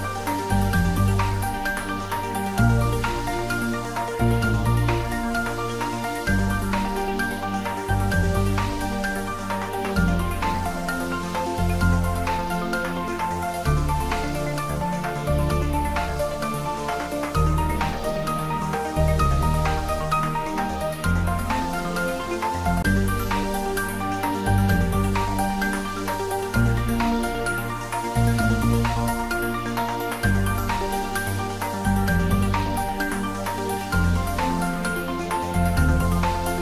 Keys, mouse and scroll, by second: 0.7 click, 1.7 3, 2.4 click, 3.4 shift+click, 4.7 click, 5.2 scroll down 1, 5.6 middle click, 6.8 e, 8.7 click, 9.4 g, 9.9 z, 11.7 click, 12.0-13.5 middle drag, 13.5-14.0 scroll up 1, 14.0-15.6 middle drag, 15.6 s, 16.3 y, 17.9 click, 18.4-21.3 middle drag, 21.1-22.0 typing, 22.9 click, 23.3 middle click, 24.5-25.0 scroll down 1, 25.0-28.4 middle drag, 28.4-29.9 scroll up 1, 32.9 ctrl+z, 33.1 middle click, 34.1 ctrl+z, 35.1 middle click, 36.1-36.4 scroll up 1.